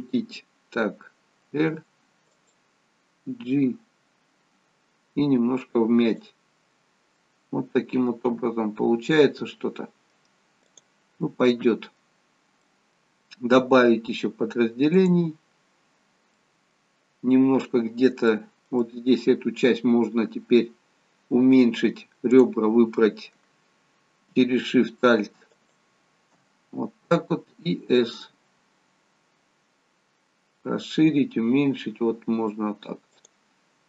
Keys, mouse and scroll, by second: 1.6 r, 3.5 g, 7.2 middle click, 10.8 click, 11.3 middle click, 12.3-12.7 scroll down 3, 12.7 middle click, 15.0 click, 16.4 middle click, 17.0-18.2 scroll up 1, 18.2 scroll up 1, 18.4 middle click, 22.5 click, 25.8 alt+shift+click, 28.3 s.